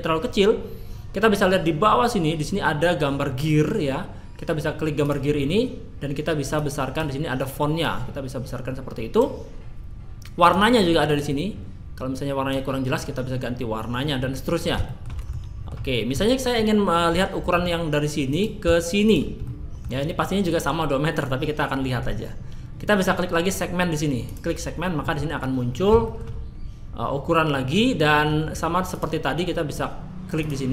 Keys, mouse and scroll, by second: 2.2 scroll down 2, 5.0 click, 5.4-6.3 scroll down 1, 6.3 scroll down 1, 6.5 click, 7.8 click, 10.4 click, 14.9 shift+middle click, 15.3 middle click, 15.8 scroll down 2, 16.2 middle click, 16.7-17.1 scroll up 1, 17.1 middle click, 18.3 click, 19.0 shift+click, 19.4 middle click, 24.3 click, 25.0 middle click, 25.7 scroll up 2, 26.0 shift+middle click, 28.1-28.9 scroll down 2, 28.9 click, 30.4 click.